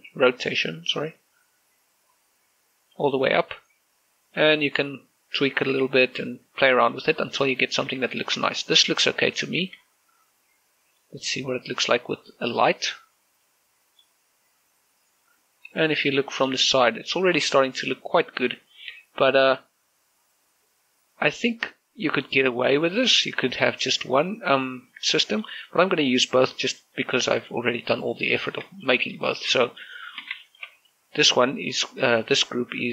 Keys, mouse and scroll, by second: 0.1-4.1 drag, 4.9 click, 7.0 click, 8.0-10.4 middle drag, 10.4 shift+z, 13.4 shift+click, 14.2-17.2 middle drag, 26.3 z, 26.9-27.2 scroll down 1, 27.2 z, 27.6 middle click, 28.8 click, 29.6 middle click, 30.0 shift+middle click, 30.4 middle click, 30.7 shift+middle click, 31.2 shift+middle click, 31.6 right click.